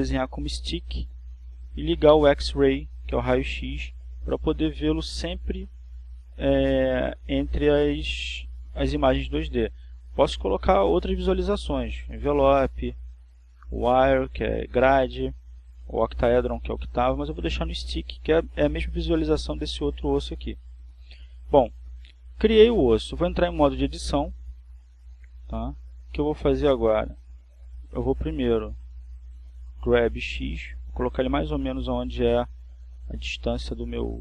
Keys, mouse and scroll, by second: 1.0 click, 4.6 click, 7.5 click, 14.5 click, 15.5 click, 17.7 click, 19.4 click, 20.2 click, 21.6 click, 28.2 Tab, 29.9 right click, 31.4 right click, 33.9 g.